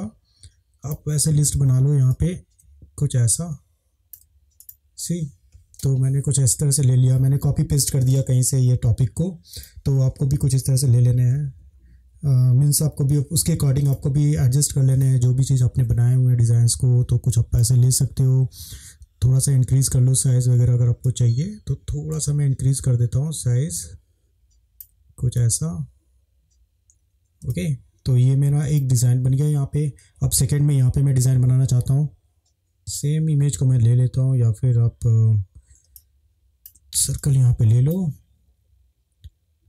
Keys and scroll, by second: 10.7 Left, 10.8 Left, 10.9 Left, 11.1 Left, 11.2 Left, 11.4 Left, 11.5 Left, 12.6 Down, 12.9 Right, 27.5 space, 32.7 space, 36.0 space.